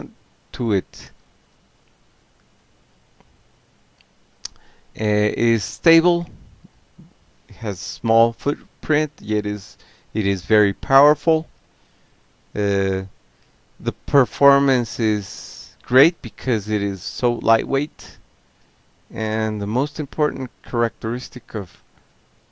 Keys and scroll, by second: 0.7 y, 4.2 Tab, 5.3 p, 5.8 Tab, 6.2 r, 6.4 Tab, 7.2 Return, 10.5 q, 14.7 ctrl+alt+v, 16.7 ctrl+x, 16.9 o, 17.2 Up, 18.5 ctrl+x, 19.1 o, 20.0 ctrl+c, 20.3 ctrl+a, 20.8 0, 21.3 7, 21.7 Return.